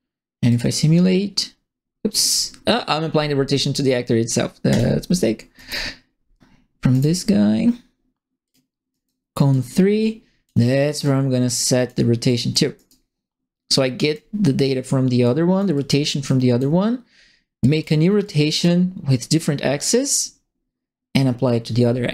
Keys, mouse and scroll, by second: 0.4 click, 2.2 click, 4.7 click, 5.5 right click, 6.9 right click, 8.4 click, 8.9 right click, 9.5 click, 11.0 click, 12.2 click, 12.7 right click, 13.7 click, 15.2 click, 15.7 click, 16.2 click, 17.6 click, 18.2 click.